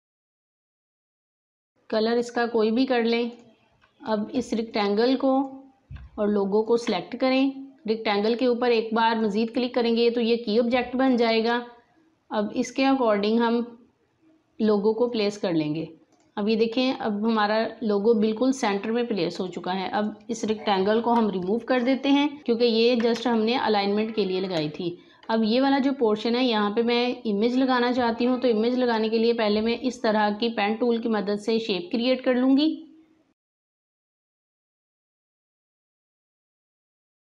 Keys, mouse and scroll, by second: 6.5 shift+click, 15.0 click, 19.3 click, 20.9 Delete, 22.4-22.8 alt+scroll down 2, 23.1 space, 23.3 click, 23.8 space, 32.4 click, 34.2-37.2 drag.